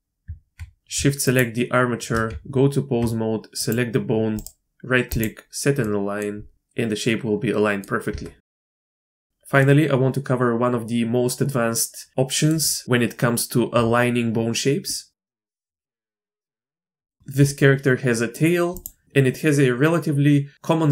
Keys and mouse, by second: 0.2 Tab, 2.3 Tab, 4.4 right click, 5.8-6.2 drag, 6.5-7.8 drag, 8.1 Tab, 8.5 shift+middle click, 8.8 middle click, 9.0 shift+middle click, 9.1 middle click, 9.6-12.5 middle drag, 14.9 click, 15.6 Tab, 17.1 middle click, 18.1 click.